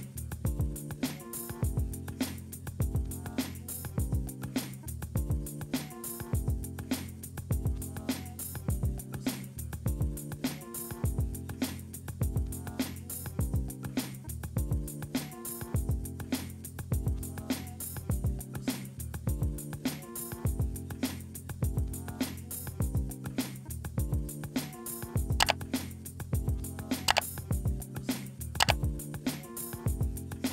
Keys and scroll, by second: 6.9 ctrl+=.